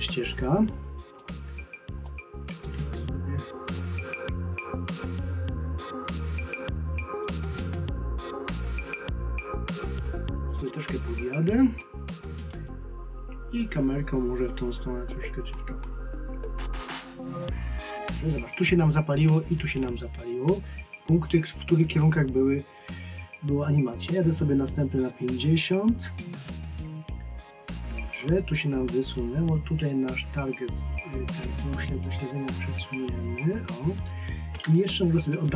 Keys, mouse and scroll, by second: 7.2 click, 11.8 middle click, 20.9 click, 25.1 click, 29.8 click.